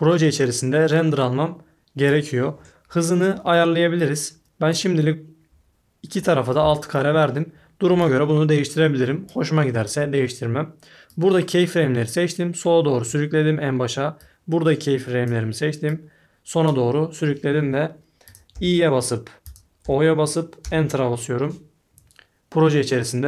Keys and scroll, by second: 18.5 i, 19.8 o, 20.6 Return.